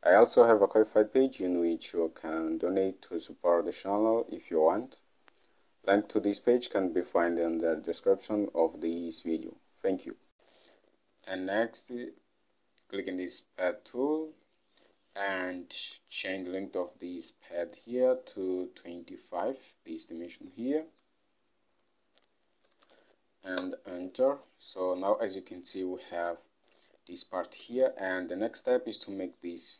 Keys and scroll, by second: 10.3 Home, 16.3 ctrl+Tab, 22.6-23.5 typing, 23.7 Return, 27.7 ctrl+Tab.